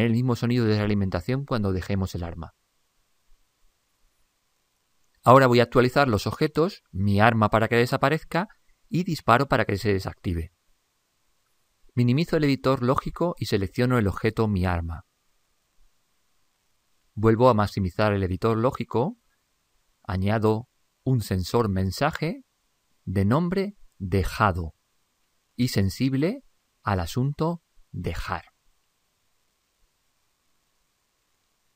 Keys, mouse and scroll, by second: 12.3 ctrl+Up, 14.5-16.3 right drag.